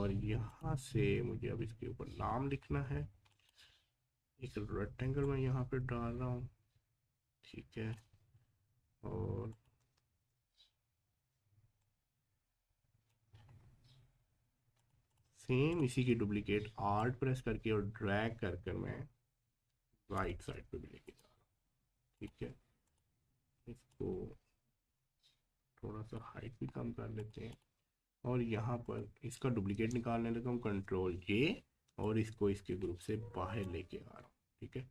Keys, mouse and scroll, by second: 1.0 scroll up 1, 3.3-9.5 drag, 9.8 v, 10.7-11.1 scroll up 1, 11.8-13.3 drag, 13.3-13.7 scroll down 1, 14.8 click, 15.7 alt+click, 17.0-27.2 alt+drag, 30.6 ctrl+j, 32.0-34.2 drag, 34.2-34.9 scroll down 1.